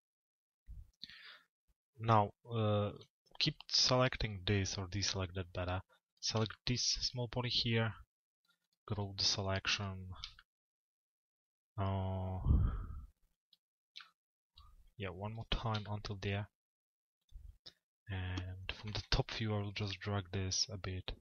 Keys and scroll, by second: 18.4 t, 19.0 z.